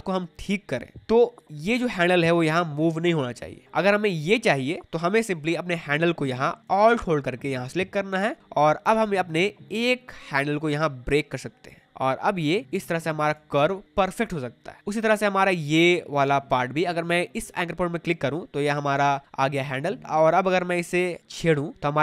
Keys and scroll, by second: 0.9 ctrl+z, 4.8 ctrl+z.